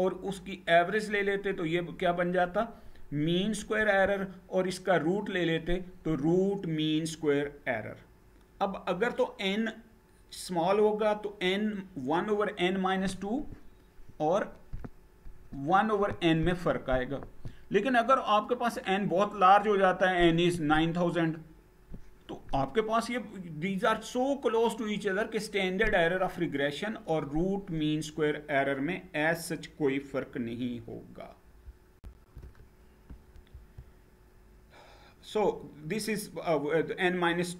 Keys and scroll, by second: 31.7 shift+F9, 33.2 Down.